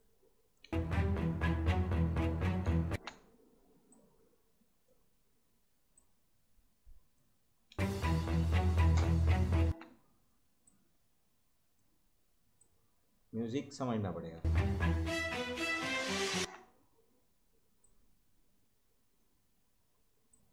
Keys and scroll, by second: 0.6 space, 2.8 space, 7.7 space, 9.6 space, 14.3 space, 16.3 space.